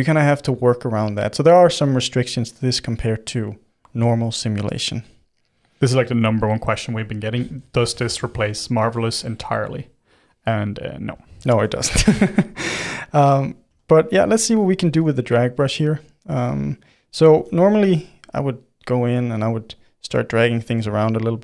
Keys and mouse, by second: 7.3 ctrl+z, 7.4 ctrl+z, 7.8 ctrl+z, 8.1 ctrl+z, 8.6-10.7 middle drag, 10.7 f, 11.6-13.7 middle drag, 13.7 f, 14.5 f, 14.9 f, 16.2-17.3 drag, 17.3 f, 17.9 f, 18.4 middle click, 19.2-20.4 drag, 20.4 middle click, 20.9-21.4 shift+drag.